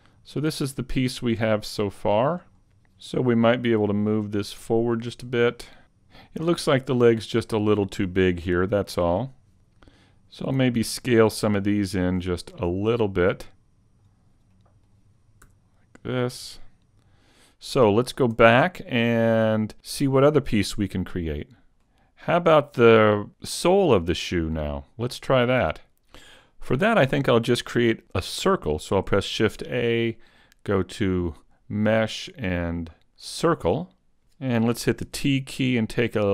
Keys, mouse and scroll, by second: 0.6-0.9 scroll up 4, 0.9 middle click, 2.5 scroll up 1, 2.8 Tab, 2.8 ctrl+alt+Left, 3.9 click, 5.5 middle click, 8.8 middle click, 9.2 scroll up 2, 10.1 alt+right click, 11.7 alt+shift+right click, 12.5 middle click, 14.5 middle click, 15.5 s, 16.7 Tab, 16.7 scroll down 2, 16.7 a, 16.7 middle click, 17.7 shift+middle click, 18.7 a, 20.5 click, 21.8 shift+middle click, 29.4 shift+a, 35.1 t.